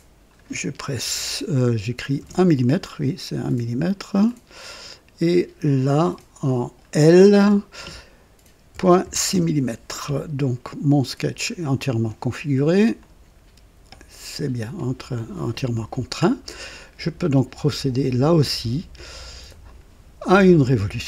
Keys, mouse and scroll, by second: 1.0 KP_1, 2.2 Return, 4.2-5.1 drag, 5.6 click, 7.4 l, 8.7 KP_Decimal, 9.0 KP_6, 9.3 Return, 11.5-12.2 scroll down 2, 13.0 click, 13.4 typing, 18.2 click, 19.6 click.